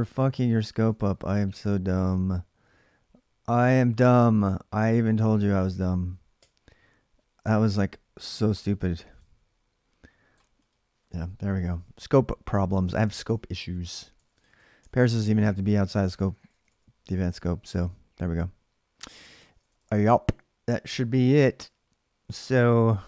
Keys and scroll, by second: 0.0-1.7 typing, 6.2 o, 11.5 ctrl+[, 11.6-17.0 typing, 15.9 ctrl+[, 19.2 ctrl+[, 19.4 typing, 19.6 Return.